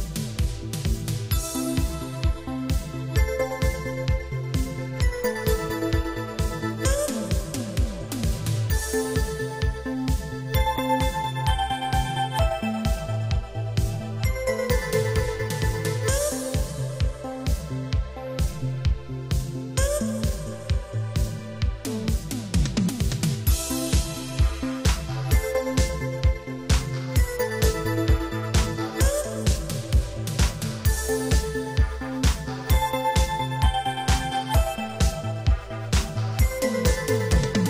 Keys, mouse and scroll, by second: 1.1 click, 1.1 click, 2.1 3, 3.8 click, 10.0 shift+space, 11.5 Escape, 12.6 click, 24.0 click, 25.7 click, 25.9 click, 26.6 g, 27.7 click, 27.9 click, 28.3 click, 29.1 shift+space, 30.0 Escape, 30.3 space, 30.9 Escape, 31.3 shift+space, 32.3 Escape, 32.7 shift+space, 33.6 Escape, 34.6 click.